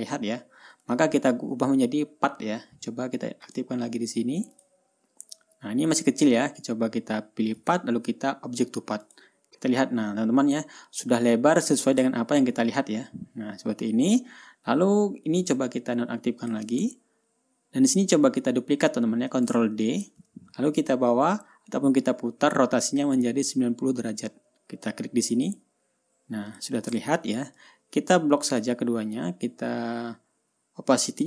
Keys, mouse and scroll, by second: 0.0 ctrl+scroll up 2, 1.5 ctrl+scroll up 2, 3.9 click, 5.0 click, 8.1 click, 9.4 click, 12.6 ctrl+scroll down 2, 15.9 click, 16.9 click, 17.4 ctrl+scroll down 2, 18.0-18.4 ctrl+scroll up 2, 20.3 ctrl+d, 25.8 click, 27.0 click, 27.4 ctrl+scroll down 2, 28.1-29.2 ctrl+drag.